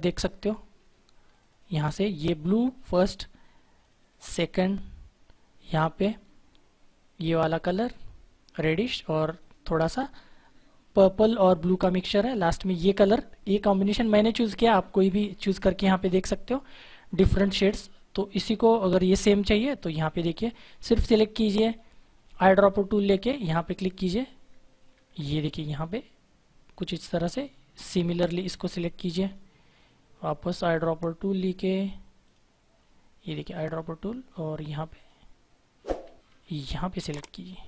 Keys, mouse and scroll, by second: 0.3 click, 3.7 click, 9.1 click, 13.6 click, 19.4 click, 22.2 click, 24.9 ctrl+z, 25.7 click, 32.2 click, 36.2 ctrl+z, 37.1 click.